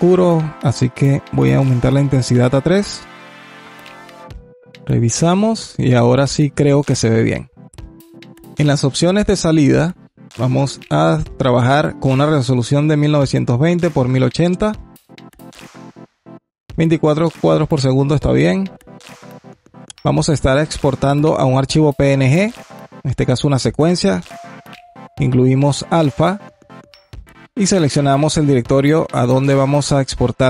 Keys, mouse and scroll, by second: 0.7 click, 1.6 click, 2.0-4.5 drag, 4.6-7.2 drag, 9.3 click, 12.0-14.5 drag, 17.9-19.7 scroll down 2, 19.7-22.2 drag, 23.7 click, 26.7-29.3 drag.